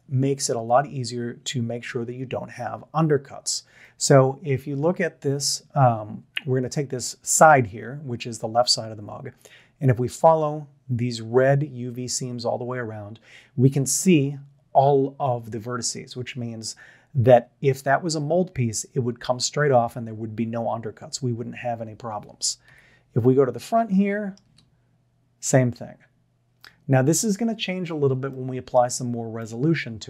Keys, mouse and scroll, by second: 4.0-4.8 shift+middle drag, 22.7 KP_1, 23.9-24.4 shift+middle drag, 27.8 scroll down 1, 28.3-28.8 shift+middle drag, 29.4-29.8 middle drag.